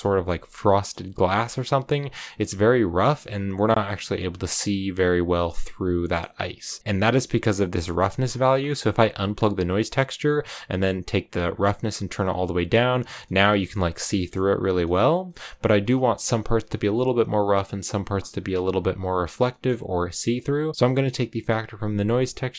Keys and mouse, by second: 0.5 shift+middle click, 1.3 shift+middle click, 5.9 click, 8.4 click, 11.5-12.6 drag, 13.1 shift+click, 13.9 shift+middle click, 15.1 middle click, 20.7-22.5 drag.